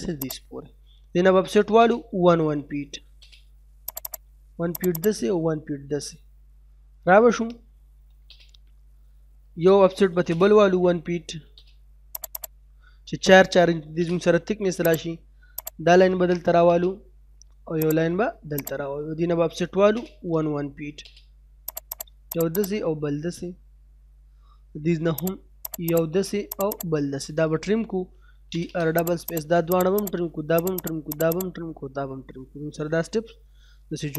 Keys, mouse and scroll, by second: 0.2 click, 1.3 o, 1.7 space, 2.1 1, 3.1 space, 3.9 click, 6.4 middle click, 7.9 l, 8.2 space, 8.8-9.9 scroll up 1, 10.0 o, 10.2 space, 10.5 1, 11.5 space, 12.2 click, 12.7 middle click, 13.7 l, 13.9 space, 14.9 click, 15.9-16.3 scroll down 1, 16.3 middle click, 16.6 space, 16.8 scroll up 1, 17.8 click, 19.4-20.9 typing, 21.0 scroll up 1, 21.7 click, 23.2 middle click, 23.6 scroll down 1, 23.9 middle click, 24.4 scroll up 1, 25.2 click, 27.8-28.7 typing, 28.7 scroll up 1, 28.9 click, 31.7-32.4 scroll down 1, 32.4 middle click, 33.0 scroll up 1, 33.7 middle click.